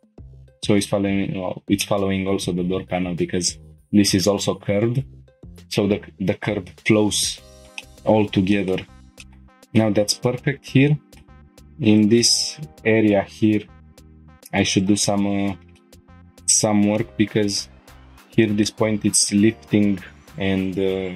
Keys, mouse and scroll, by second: 0.2 scroll up 1, 0.3 Tab, 0.5 click, 0.9 Tab, 1.8 shift+middle click, 7.6 shift+Tab, 7.6 shift+middle click, 7.6 click, 7.8 middle click, 8.5 shift+middle click, 8.9 scroll down 1, 9.2 middle click, 9.4 Tab, 9.5 middle click, 10.0 scroll up 1, 10.4 shift+middle click, 10.9 middle click, 15.8 middle click, 16.1 scroll up 1, 17.0 middle click, 18.6 middle click, 21.0 scroll down 1.